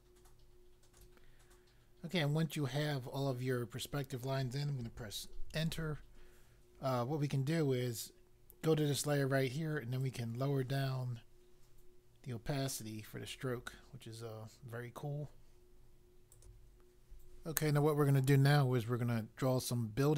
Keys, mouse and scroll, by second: 5.4 Return, 10.0 click, 16.3 click.